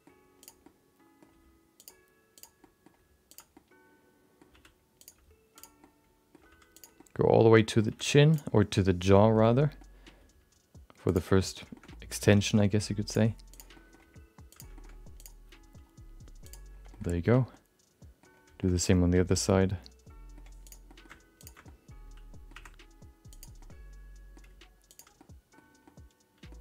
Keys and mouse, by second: 0.4 click, 0.6 middle click, 1.3 g, 2.3 click, 2.6 middle click, 2.9 g, 3.6 middle click, 4.5 r, 5.1 g, 5.9 middle click, 6.5 g, 7.0 middle click, 8.0 r, 8.6 middle click, 9.9 middle click, 10.1 g, 11.4 middle click, 11.7 shift+middle click, 12.0 middle click, 12.4 shift+middle click, 13.0 click, 13.5 click, 13.8 middle click, 14.0 g, 15.2 click, 15.4 g, 17.1 middle click, 17.6 middle click, 18.6 middle click, 19.4-20.4 middle drag, 20.6 click, 20.8 middle click, 21.4 ctrl+shift+click, 21.7 middle click, 22.5 e, 23.6 middle click, 24.4 g, 25.3 middle click, 25.9 middle click.